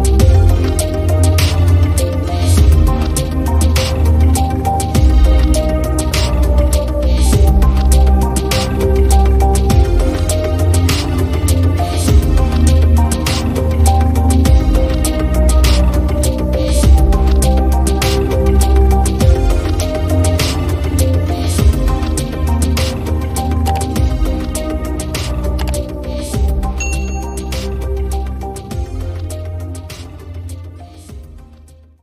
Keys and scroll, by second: 4.6 i.